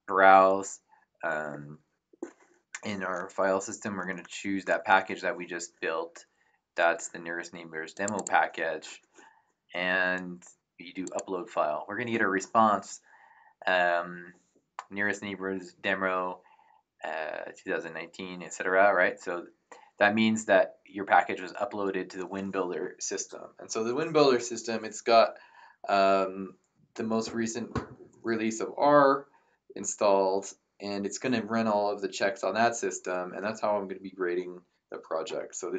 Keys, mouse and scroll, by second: 7.9 click, 11.0 click.